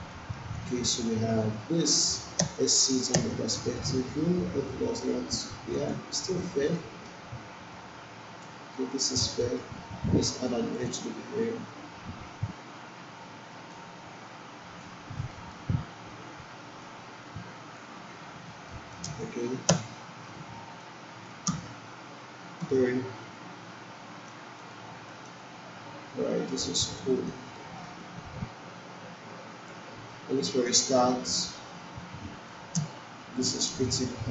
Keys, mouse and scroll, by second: 0.6-2.1 alt+drag, 2.4 space, 3.2 space, 4.6-5.3 alt+middle click, 5.7 click, 6.8-7.4 alt+middle drag, 8.4 1, 9.4 alt+middle click, 10.7 click, 13.7-15.0 drag, 15.3 alt+middle click, 16.8-18.0 drag, 18.2 q, 18.7 alt+right click, 19.0 space, 20.8-21.4 alt+click, 21.4 space, 22.6 3, 23.4 right click, 24.6 click, 25.1 alt+right click, 25.4-26.9 alt+drag, 27.0 alt+right click, 27.5 alt+middle click, 28.0-29.8 alt+drag, 30.1-30.7 alt+right click, 30.8-31.5 alt+click, 32.0-32.6 alt+click, 32.8 space.